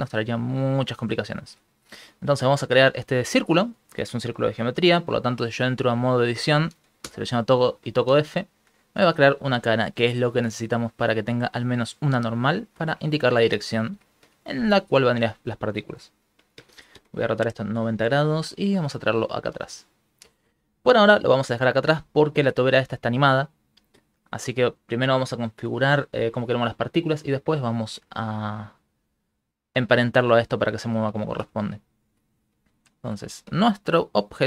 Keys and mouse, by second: 0.2 s, 1.0 middle click, 1.2 ctrl+middle click, 1.6 Tab, 2.2 shift+middle click, 3.2 Tab, 7.0 f, 8.6 middle click, 9.0 Tab, 9.4 middle click, 10.5 middle click, 10.8 ctrl+middle click, 11.1 middle click, 12.6 middle click, 13.3 ctrl+middle click, 13.6 middle click, 14.4 shift+middle click, 14.9 r, 18.6 shift+middle click, 19.0 g, 20.6 ctrl+middle click, 21.5 shift+middle click, 22.4 shift+space, 24.4 Escape, 28.1 shift+middle click, 28.6 middle click, 30.5 middle click, 31.3 shift+middle click, 31.6 ctrl+middle click, 31.9 shift+middle click, 32.4 ctrl+middle click, 32.8 shift+middle click, 33.3 ctrl+middle click, 33.7 shift+middle click.